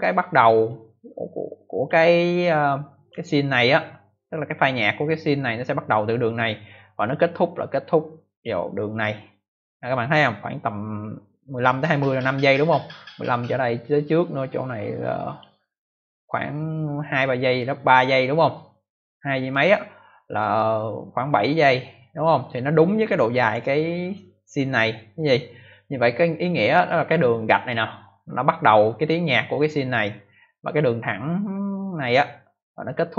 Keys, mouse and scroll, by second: 0.6 click, 2.9 click, 7.0 click, 14.6 click, 21.9 click, 23.1 click, 26.5 click, 30.0 click.